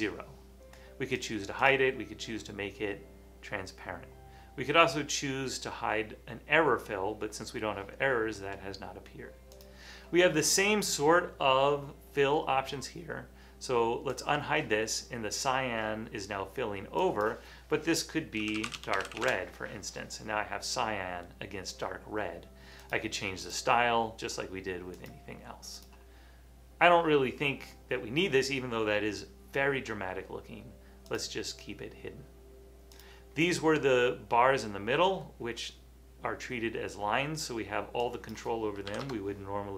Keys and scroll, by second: 18.2-19.7 typing, 39.0 2.